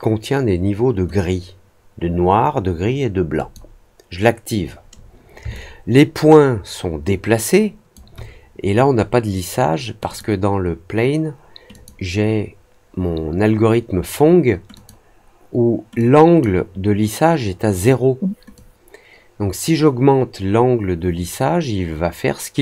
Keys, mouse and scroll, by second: 3.3 click, 5.5-7.9 alt+drag, 10.0 click, 11.7 click, 14.7 click, 15.9 click, 18.5-22.6 drag.